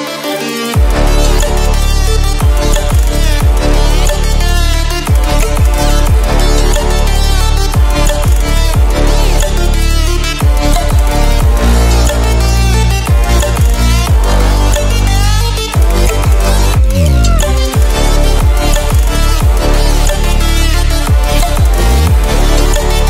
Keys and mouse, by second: 0.2 click, 0.2 click, 2.6 click, 6.6 click, 11.9 Return, 12.1-21.1 typing, 22.2-23.0 typing.